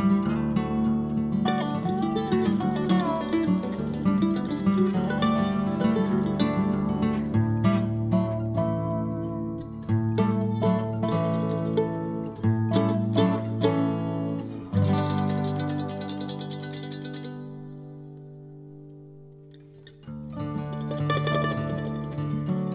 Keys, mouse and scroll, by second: 5.5-5.9 scroll up 1, 5.9-8.0 drag, 8.0 scroll down 1, 8.3-13.4 drag, 13.4-14.0 scroll down 2, 14.0-17.9 drag, 17.9-18.9 middle drag, 18.9-20.2 drag, 20.2-20.7 scroll up 1, 20.7-22.2 drag, 22.2-22.7 scroll up 1.